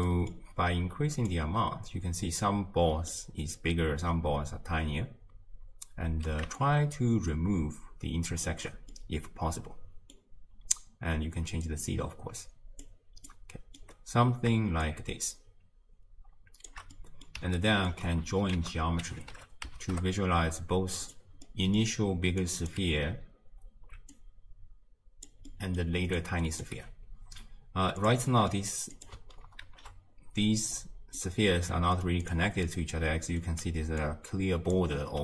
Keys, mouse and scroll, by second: 1.3 click, 2.3-6.8 middle drag, 6.8-9.0 shift+drag, 9.0-11.8 middle drag, 11.8-19.9 drag, 19.9 ctrl+a, 22.4-25.3 drag, 26.2-26.7 drag, 29.0 click, 29.7 ctrl+h, 30.7-31.2 scroll up 2, 31.2-32.3 middle drag, 32.3 click, 32.7-34.1 middle drag, 34.1-34.7 drag, 34.7 d.